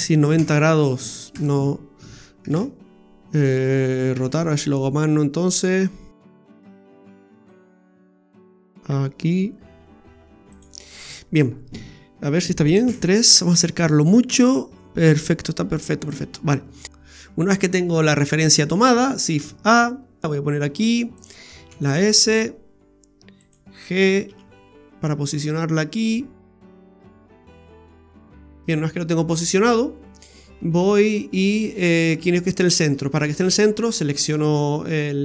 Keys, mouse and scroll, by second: 2.5 ctrl+z, 4.1 r, 10.8-11.3 scroll down 2, 11.1 middle click, 12.8 KP_3, 13.3-13.9 scroll up 14, 15.4-16.8 scroll down 16, 16.7 middle click, 19.4 shift+a, 20.2 g, 21.7 s, 23.9 f, 24.2 g, 28.4-29.3 scroll up 4, 30.1-30.8 scroll down 2, 30.8 shift+middle click, 33.2 right click, 34.5 shift+s.